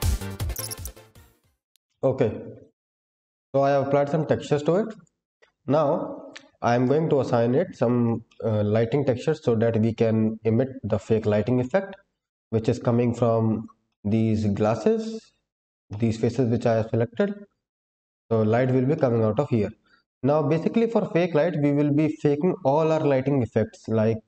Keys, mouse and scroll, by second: 0.0-1.6 typing, 0.2 click, 0.3 middle click, 0.5 click, 0.5 shift+middle click, 0.6 middle click, 0.6 middle click, 0.9 middle click, 0.9 scroll down 1, 1.0 click, 1.1 click, 1.3 click, 1.4 click, 1.5 shift+click, 1.7 shift+middle click, 1.9 middle click, 1.9-2.6 scroll down 3, 4.9 click, 4.9 scroll down 1, 6.0-6.6 scroll down 4, 7.7 shift+middle click, 8.2 middle click, 9.2-10.7 scroll down 8, 11.3-12.1 scroll down 1, 12.1 click, 12.7 middle click, 13.5 click, 13.8 middle click, 14.6 click, 14.9 middle click, 15.3 click, 15.8 middle click, 16.6 shift+click, 17.1 middle click, 17.9 shift+click, 18.4 shift+click, 18.9 middle click, 19.9-21.5 scroll down 3.